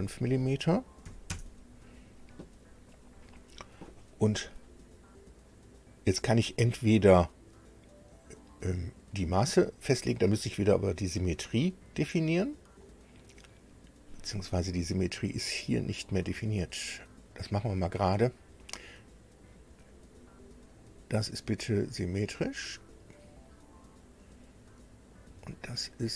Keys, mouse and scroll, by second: 1.0 KP_5, 1.3 KP_Enter, 17.3 click, 19.7 click, 20.7 click, 22.7 click, 25.1 click.